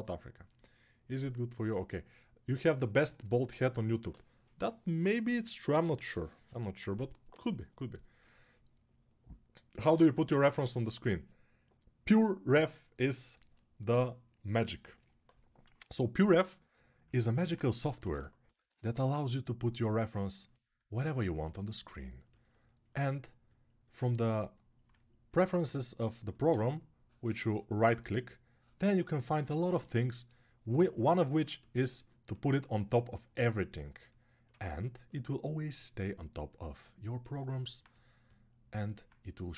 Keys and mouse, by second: 15.8-19.4 ctrl+middle drag, 16.0 ctrl+Tab, 17.7 g, 18.4 ], 18.5 ], 19.4 click, 19.6 alt+middle click, 20.5-37.1 drag.